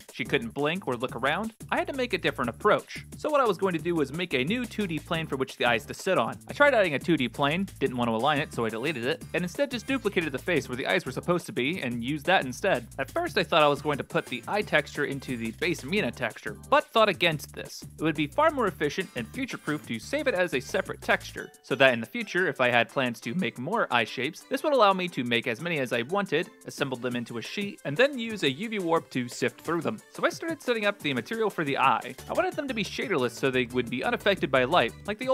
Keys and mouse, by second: 0.5 middle click, 1.5 Tab, 2.4 click, 2.7 shift+a, 6.4 click, 6.4 g, 7.3 click, 9.0 3, 9.1 right click, 9.6 click, 10.1 shift+d, 11.6 click, 12.4 ctrl+space, 13.7 click, 14.9 g, 16.8 shift+click, 18.4 a, 19.4 alt+p, 20.2 u, 21.7 shift+click, 28.0 click, 29.7 click, 30.0 shift+a, 31.1 s, 31.6 drag, 32.2 click, 33.2 click, 33.3 shift+a.